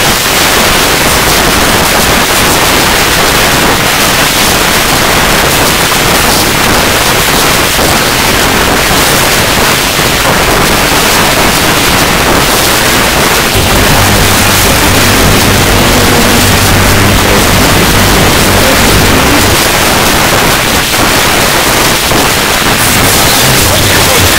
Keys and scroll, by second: 19.6 Page_Down.